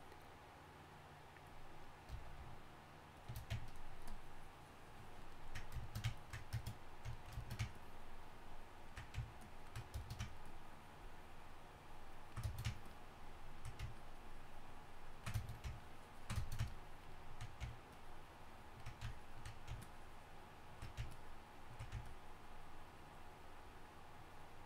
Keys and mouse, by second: 2.3 shift+f.